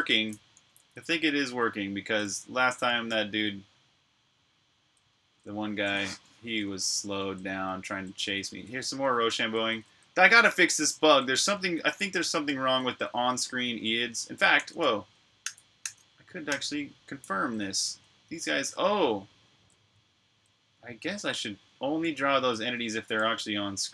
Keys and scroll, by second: 0.9-1.5 typing, 3.3-9.2 typing, 11.5-12.7 typing, 19.0-23.4 typing.